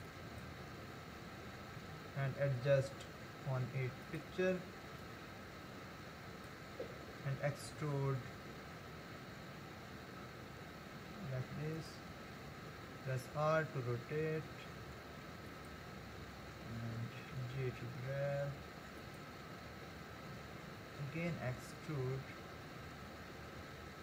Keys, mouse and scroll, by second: 0.1 click, 1.8 g, 5.0 click, 7.7 e, 12.9 r, 17.3 g, 21.3 e.